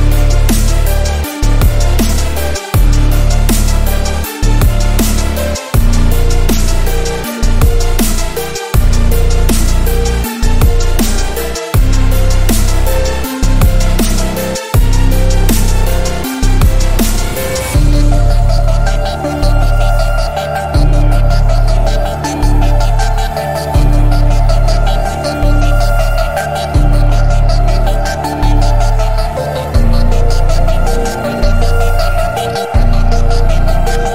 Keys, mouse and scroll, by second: 1.4-1.9 alt+right click, 2.1 click, 2.8 alt+scroll up 1, 3.2-4.1 click, 5.5 drag, 8.8 alt+scroll down 1, 9.5-9.8 alt+click, 10.2 alt+scroll down 1, 12.9 click, 14.6 alt+scroll up 1, 14.9 space, 15.0-15.4 click, 15.2 space, 16.1 click, 18.3 space, 18.6 click, 20.2 alt+scroll down 1, 20.7 click, 21.6 alt+scroll down 1, 22.1 click, 22.9 space, 23.0-23.5 click, 23.5 space, 23.8 click, 26.0 click, 26.1 alt+scroll down 1, 27.8 click, 29.2-34.1 drag.